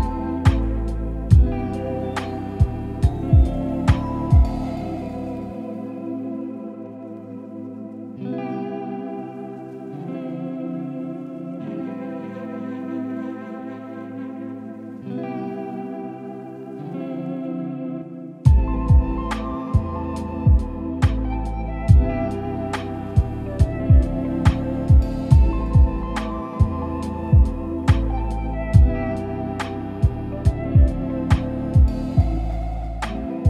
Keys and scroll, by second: 28.8 super+e.